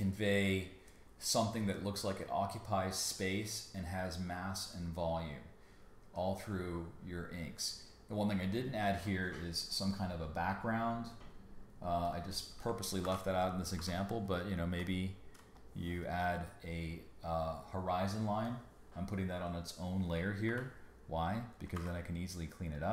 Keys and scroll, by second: 13.0 alt+shift+super+n, 13.8 b, 20.5 l, 21.7 super+x.